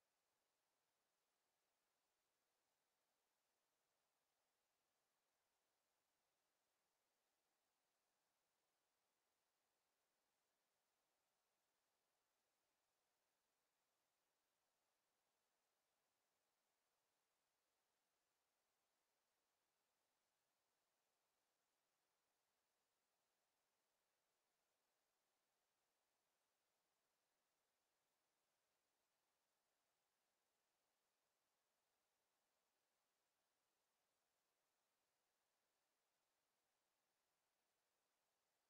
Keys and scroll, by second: 0.3 d, 1.2 w, 2.9 w, 12.5 space, 12.9 w, 15.3 space, 16.0 w, 17.1 space, 17.7 w, 19.9 Escape.